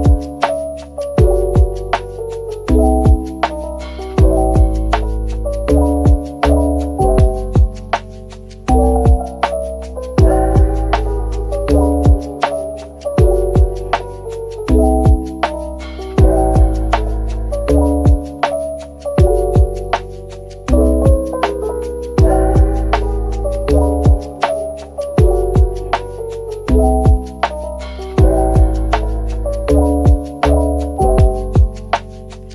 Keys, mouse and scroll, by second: 0.0 Tab, 6.3 double click, 6.8-7.8 typing, 8.7 Tab, 20.7 ctrl+z, 21.1 ctrl+z.